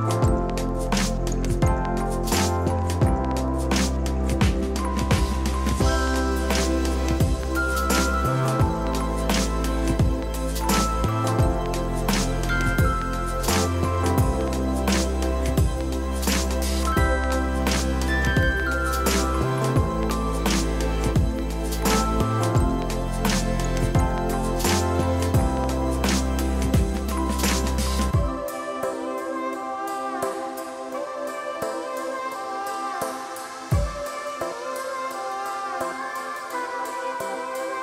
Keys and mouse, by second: 0.0 a, 0.3 click, 1.4 KP_3, 1.5 Return, 2.6 click, 3.0 x, 3.5 ctrl+click, 4.1 x, 4.3 click, 5.0 Escape, 5.8 c, 6.4 KP_2, 6.5 Return, 6.7 click, 7.8 KP_2, 7.9 Return, 9.3 a, 9.4 click, 21.3 KP_0, 21.6 Return, 21.9 KP_0, 22.2 Return, 22.6 click, 23.0 s, 23.3 ctrl+click, 26.3 Pause, 26.9 c, 27.3 click, 28.2 Right, 29.0 click, 29.8 click, 30.3 click, 31.5 ctrl+click, 32.2 ctrl+click, 33.1 x, 33.5 Return, 34.3 ctrl+shift+x, 34.7 click, 34.9 right click, 35.3 click, 37.0 click.